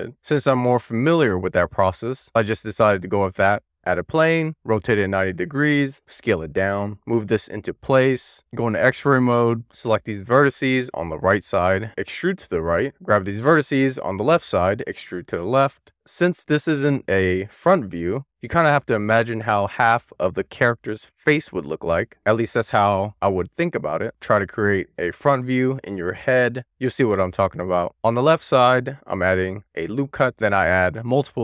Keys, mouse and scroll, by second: 4.4 e, 4.8 click, 5.5 9, 5.9 w, 6.0 click, 6.1 e, 6.4 click, 6.9 w, 7.2 click, 8.3 w, 8.8 d, 9.7 x, 12.8 click, 13.4 d, 13.7 x, 15.9 click, 18.1 click, 29.5 ctrl+r, 30.4 right click, 31.1 ctrl+r.